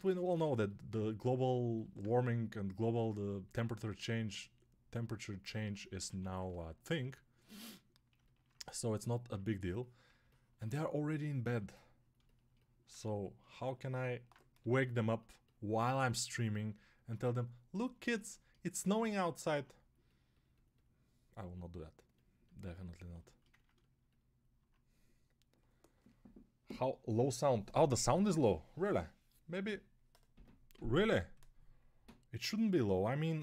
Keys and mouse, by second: 5.9 1, 14.4 g.